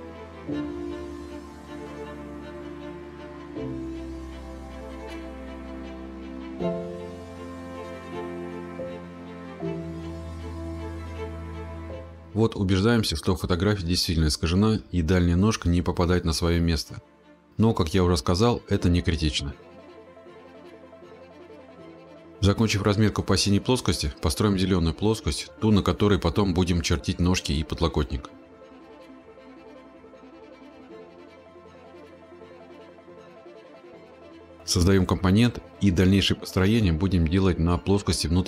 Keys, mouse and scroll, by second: 2.4 click, 3.6-4.5 typing, 4.8-6.6 scroll, 6.6-7.6 scroll, 7.6-8.4 scroll, 8.9-9.9 scroll, 11.3 click, 12.0-12.3 scroll, 14.6-16.4 scroll, 19.6 ctrl+я, 19.8 click, 20.5-22.3 scroll, 23.4 BackSpace, 25.6 click, 26.0-27.8 scroll, 32.4 click, 34.3 click, 35.2 click, 35.4 click, 35.6 click, 36.0 right click, 37.9 click.